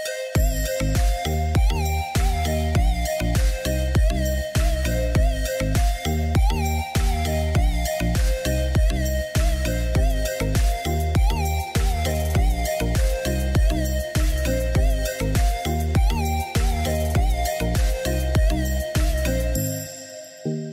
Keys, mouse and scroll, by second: 1.5-2.7 drag, 3.7 shift+a, 13.5 click, 15.0 Tab, 16.5 e, 20.1-20.7 drag.